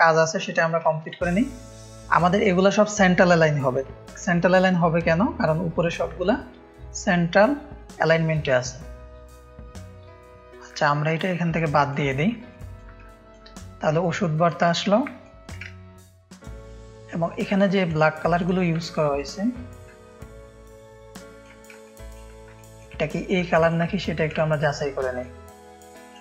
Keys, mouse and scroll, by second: 0.8 ctrl+space, 0.8 ctrl+click, 1.3 click, 1.4 space, 2.0 click, 2.9 ctrl+space, 2.9 ctrl+click, 4.0 ctrl+alt+2, 4.3 click, 4.6 drag, 5.2 click, 7.7 click, 11.1 Delete, 11.5 click, 11.9 Delete, 11.9 click, 12.1 space, 12.5 ctrl+click, 13.0 click, 13.1 space, 14.2 ctrl+space, 14.2 ctrl+click, 14.9 ctrl+space, 15.2 click, 15.6-17.8 ctrl+drag, 15.7 ctrl+space, 19.2 shift+click, 19.9-21.4 ctrl+drag, 20.1 ctrl+space, 21.7 space, 21.8 click, 22.5 click, 22.5 space, 23.4 ctrl+click, 23.5 ctrl+space, 24.3 ctrl+click, 25.1-26.2 drag.